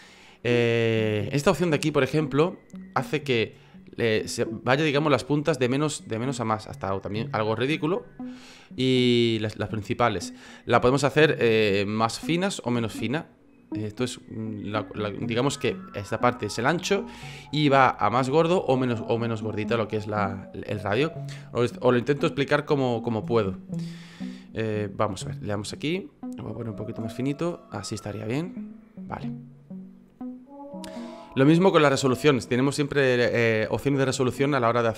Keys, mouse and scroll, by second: 20.0 F9, 21.9 F9.